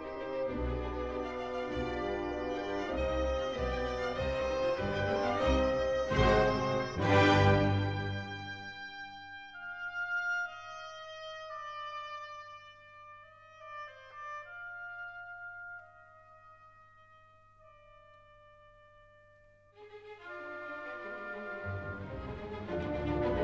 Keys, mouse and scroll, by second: 0.2 click, 2.0 click, 5.4 click, 7.7-8.9 scroll, 13.7-14.6 scroll, 15.0 scroll, 17.7 scroll, 18.2 middle click, 21.5-22.7 drag, 22.7-23.4 middle drag.